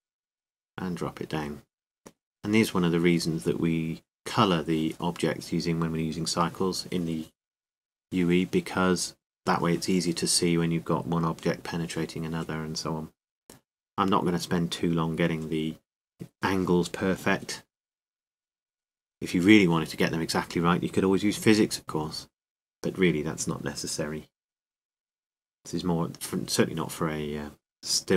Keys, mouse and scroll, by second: 2.0-5.4 drag, 5.4-7.4 middle drag, 10.0-12.7 drag, 14.6 r, 16.5-18.4 drag, 18.5-19.6 drag, 19.6-21.5 middle drag, 23.7-26.5 drag, 27.6-28.1 middle drag.